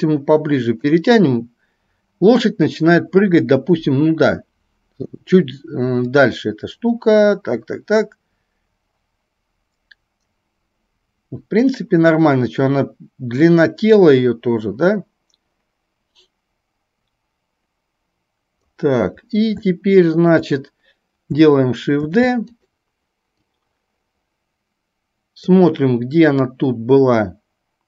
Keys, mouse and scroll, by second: 19.8-20.5 shift+middle drag, 22.2 shift+d, 23.7-25.7 drag, 26.7-27.8 drag.